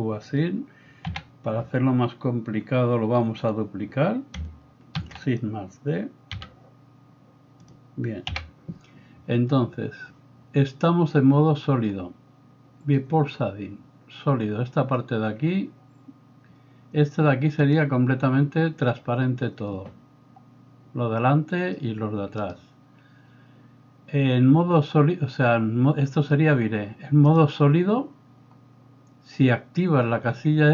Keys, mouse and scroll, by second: 1.1 a, 5.0 shift+d, 6.4 g, 8.3 a, 22.4-27.3 right drag, 27.3-30.7 drag.